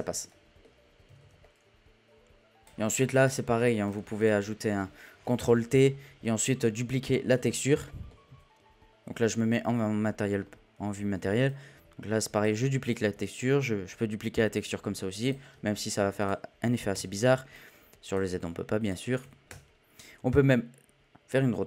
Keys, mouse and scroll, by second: 0.0-1.1 shift+middle drag, 1.1 a, 1.4-2.6 middle drag, 3.1-3.9 drag, 4.2 click, 5.4 ctrl+t, 6.2-7.3 scroll up 2, 7.3 z, 7.8 shift+middle drag, 8.1-9.8 scroll up 1, 9.8 scroll up 1, 10.0 middle click, 10.4-11.4 scroll up 2, 11.4-21.6 drag.